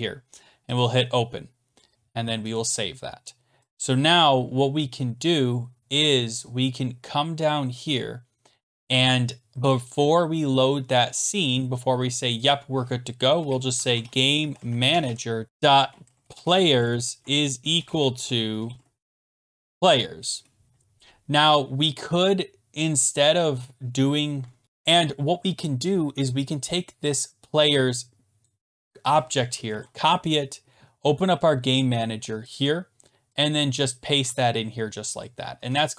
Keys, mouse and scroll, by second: 0.8 click, 2.6 click, 3.7 click, 4.8 scroll down 3, 5.7 scroll down 2, 5.8-6.7 scroll, 6.7 scroll down 10, 7.2-7.5 scroll down 4, 9.0-10.0 scroll up 1, 10.0-10.7 scroll up 3, 10.7 scroll, 12.5 click, 13.4 Return, 13.5-20.1 typing, 14.7 middle click, 23.6 shift+p, 24.6 shift+click, 24.6-25.2 scroll down 10, 24.6 BackSpace, 25.2 scroll up 7, 26.0 scroll down 2, 26.3-27.2 scroll, 28.4 click, 29.4 scroll down 11, 29.7 ctrl+c, 31.0 scroll, 32.5 click, 32.6 click, 33.4 click, 33.9 click, 34.3 ctrl+v, 35.2 click, 35.6 Return.